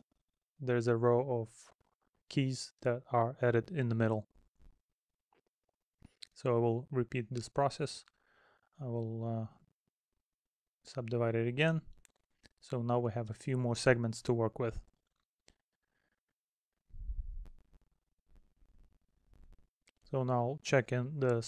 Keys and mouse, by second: 0.5 middle click, 1.5 middle click, 3.1 middle click, 4.2 middle click, 8.9 middle click, 9.6 middle click, 11.1 middle click, 13.9 middle click, 14.8 middle click, 16.1 middle click, 17.8 middle click, 19.9 middle click.